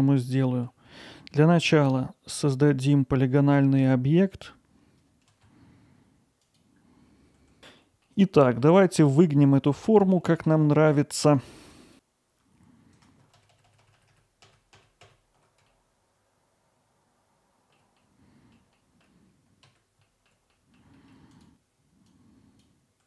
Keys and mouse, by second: 0.3 alt+middle click, 0.9-1.3 middle drag, 1.8 middle drag, 2.5-3.2 middle drag, 5.1 shift+a, 6.8 shift+z, 7.6 alt+middle click, 8.0 middle click, 8.6-9.7 alt+middle drag, 10.0 middle click, 11.9 click, 11.9 alt+middle click, 12.3 click, 13.1 click, 13.5 middle click, 13.8 click, 13.9 alt+middle click, 14.2 middle click, 14.7 alt+middle click, 15.6 alt+middle click, 15.7-17.4 drag, 17.9 alt+middle click, 18.7-20.0 middle drag, 20.3 middle click, 20.7-21.8 drag, 21.8 middle click, 22.7 ctrl+z.